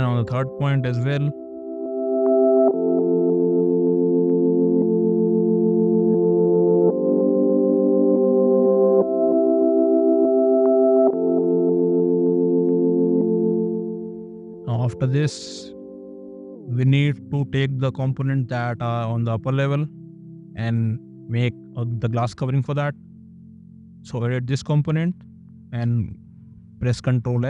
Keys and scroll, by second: 0.9 space, 9.7 e, 12.8 space.